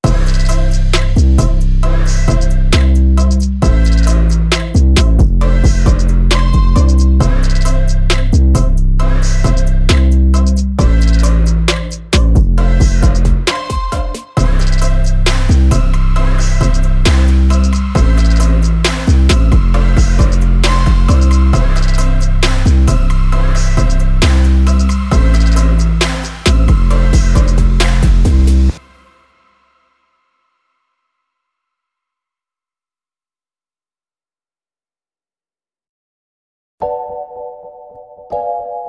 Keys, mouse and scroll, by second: 6.8 shift+click, 7.9 ctrl+g, 8.6 shift+click, 10.8 ctrl+g, 12.8 click, 14.4 click, 15.8-38.8 drag.